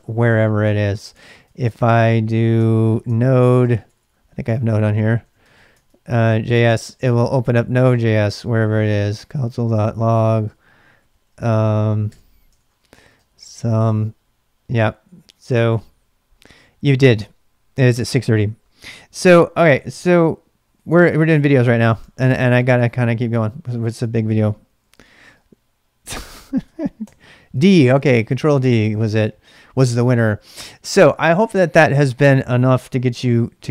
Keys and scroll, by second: 1.1 ctrl+c, 1.2-1.9 typing, 2.6 ctrl+d, 3.1 ctrl+[, 3.2-14.3 typing, 5.7 Tab, 20.7-22.5 typing, 23.2 Return, 24.6-25.5 typing, 27.0 ctrl+d, 29.7-30.5 typing.